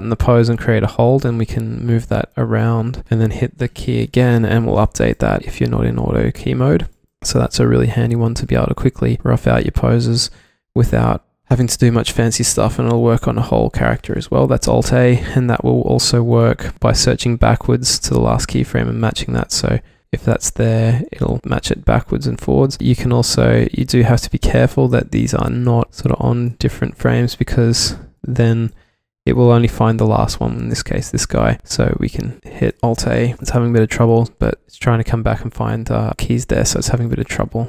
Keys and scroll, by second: 1.3 w, 3.8-4.5 typing, 7.4 v, 7.9 v, 8.9-9.3 v, 9.5 e, 10.6 w, 13.5 alt+a, 15.7 w, 19.3 w, 21.4 alt+a, 24.9 w, 25.9 q, 26.7 w, 32.0 alt+q, 32.6 super+z, 32.7 alt+a, 33.3 alt+a, 34.5 alt+a, 36.1 alt+a.